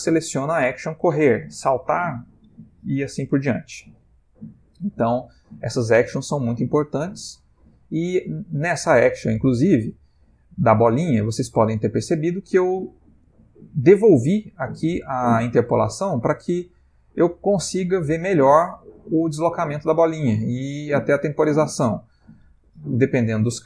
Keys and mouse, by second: 8.7 click, 13.8 click, 18.6 space, 20.9 Escape.